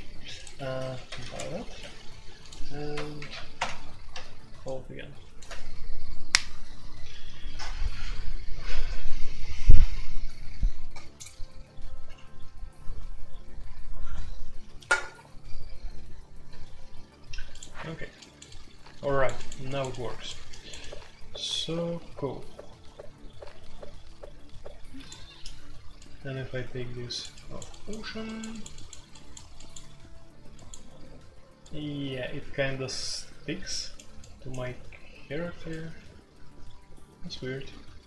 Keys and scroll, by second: 0.0-38.0 typing, 0.5 Escape, 1.0 ctrl+c, 1.2 ctrl+c, 1.8 Escape, 3.1 alt+p, 3.5 Return.